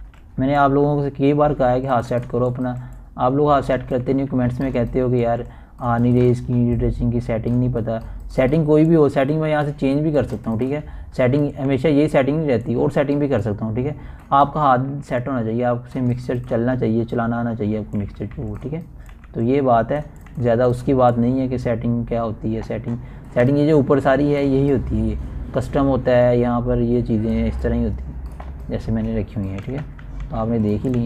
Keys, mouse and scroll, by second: 0.5-1.2 typing, 0.7 click, 1.9 click, 2.7-4.6 typing, 2.8 click, 3.7 scroll down 1, 4.5 click, 6.2-7.9 typing, 7.3 click, 8.1-11.8 drag, 10.1-12.3 typing, 11.8 scroll up 1, 13.9-14.2 typing, 14.3-15.8 drag, 15.8-18.6 typing, 16.9-17.3 scroll down 1, 17.9-20.7 drag, 20.7-21.4 typing, 21.1 click, 22.0 click, 22.5-23.5 typing, 23.3 click, 24.1 scroll down 1, 25.5 scroll up 1, 30.4-31.0 typing, 30.5 scroll down 1.